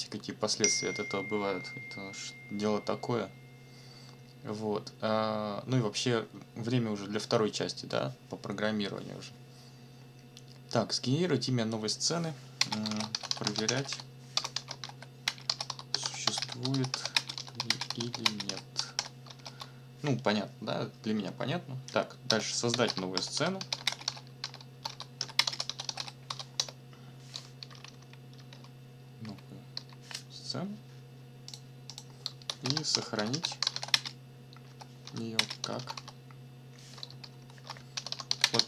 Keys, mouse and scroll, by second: 12.6-19.9 typing, 22.3 Return, 22.5-26.8 typing, 27.6 Up, 27.8 ctrl+Right, 29.2 Up, 31.5 click, 31.9 click, 32.3-36.4 typing, 37.2 ctrl+shift+Left, 37.9-38.6 typing.